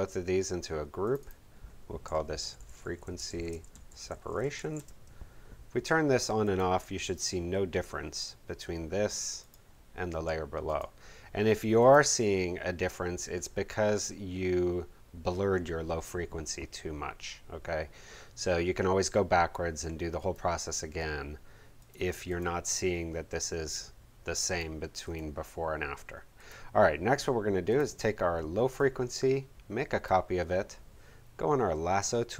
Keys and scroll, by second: 2.1-5.1 typing.